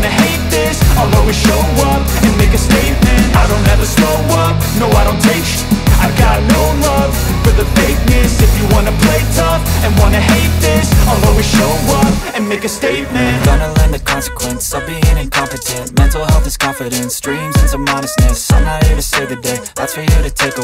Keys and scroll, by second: 2.0 space, 3.0 [, 5.7 ], 9.3 [, 11.5 [, 12.2 ], 13.7 ], 14.4 ], 16.3 [, 18.9 z, 19.8 space.